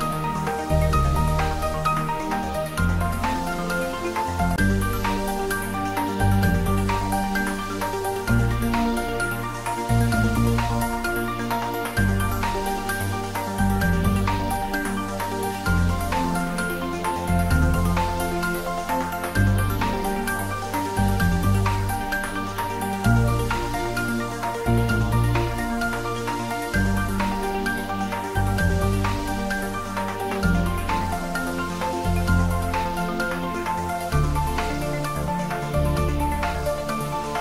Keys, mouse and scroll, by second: 1.3-1.9 middle click, 2.4 shift+click, 6.0 click, 8.6-9.2 scroll down 1, 9.2-10.7 middle drag, 11.4 click, 13.1-13.9 scroll up 1, 13.9 Tab, 14.4 click, 15.0 scroll down 1, 15.4-17.2 middle drag, 17.3-20.6 scroll up 1, 21.6-24.2 scroll down 1, 27.6 click, 30.4 click, 31.5-32.1 scroll up 1, 32.1-33.1 middle drag, 33.4 click.